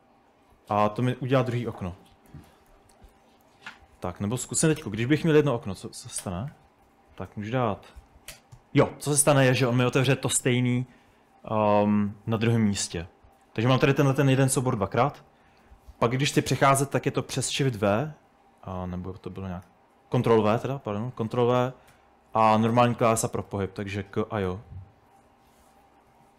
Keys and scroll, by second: 0.3-8.7 typing, 17.1-19.1 typing, 19.5 ctrl+w, 21.3 ctrl+w, 22.0 k, 22.5 ctrl+w, 22.8 j, 23.5 ctrl+w, 23.9 k, 24.3 ctrl+w, 24.5 j, 25.4 ctrl+w, 25.7-26.3 typing.